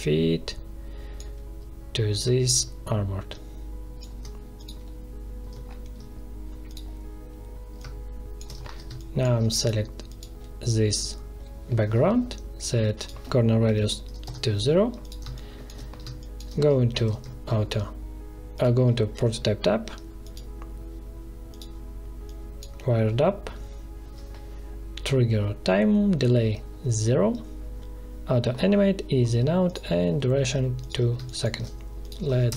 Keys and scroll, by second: 8.8 space, 13.6 0, 14.2 Return, 15.2 space, 16.9 alt+2, 31.1 space, 32.4 ctrl+Return.